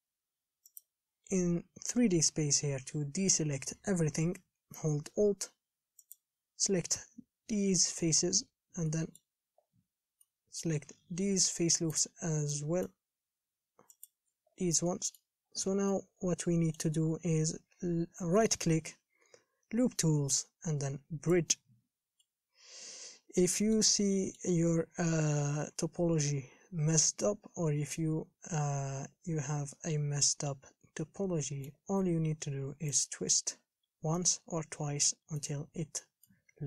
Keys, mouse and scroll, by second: 1.0 click, 9.1 middle click, 9.5-10.4 scroll down 2, 10.4-12.1 middle drag, 12.1 alt+shift+click, 12.7-14.3 middle drag, 14.3 alt+shift+click, 14.7-15.1 scroll down 6, 15.1 middle click, 15.6-16.1 scroll up 4, 16.1-21.8 middle drag, 22.4-33.3 middle drag, 33.3-34.4 drag, 34.4-36.6 middle drag.